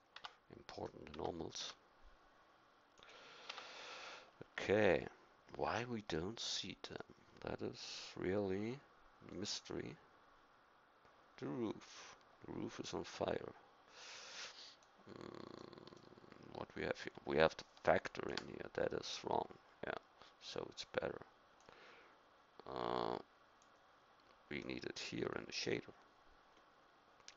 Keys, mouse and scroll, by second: 0.2 Tab, 1.1 Tab, 1.6 a, 3.5 Tab, 20.0-21.6 middle drag.